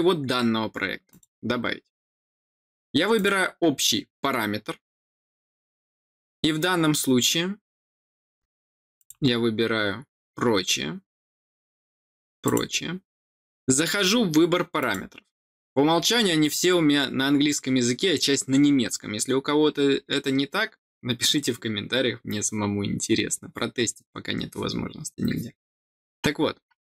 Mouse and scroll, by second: 1.0 click, 3.1 click, 8.9 click, 11.3-12.4 scroll up 2, 12.4 click, 14.7 click, 15.9-16.4 scroll down 2, 16.8-18.2 scroll up 2, 18.2-20.6 scroll up 1, 20.6-25.9 scroll up 1, 26.3-26.8 scroll down 3.